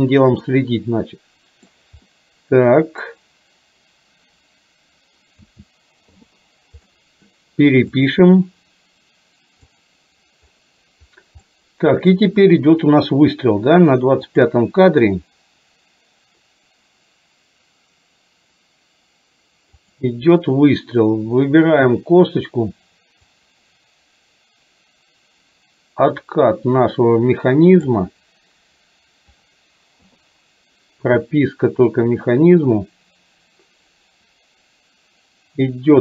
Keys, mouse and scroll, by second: 0.4-1.8 middle drag, 2.2-3.2 middle drag, 5.4 a, 6.2 i, 6.9-7.3 middle drag, 8.1 click, 9.7 click, 11.6 middle click, 14.4 click, 19.9 click, 23.7-27.9 drag, 31.9-36.0 drag.